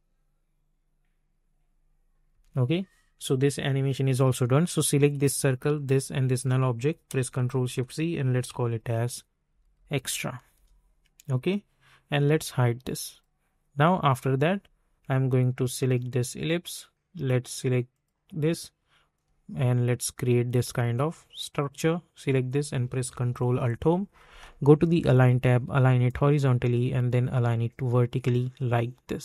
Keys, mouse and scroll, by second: 2.3 space, 5.1 click, 7.3 ctrl+shift+c, 8.1 typing, 9.5-10.2 typing, 10.5 Return, 13.1-21.5 drag, 23.5 ctrl+alt+Home, 25.1 click.